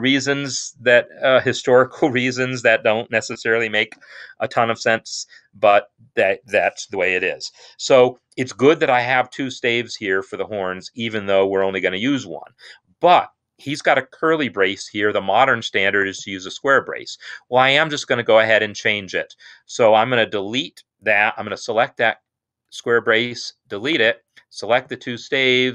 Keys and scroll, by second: 22.7 BackSpace.